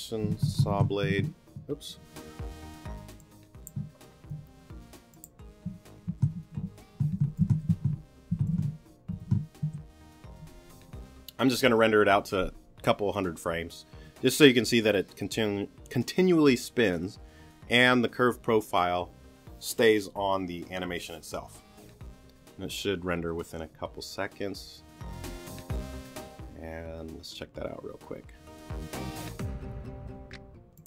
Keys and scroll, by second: 0.0-0.9 typing, 4.3 0, 6.1 s, 9.1 super+e, 9.2 super+d, 9.6 super+Return, 10.3 Return.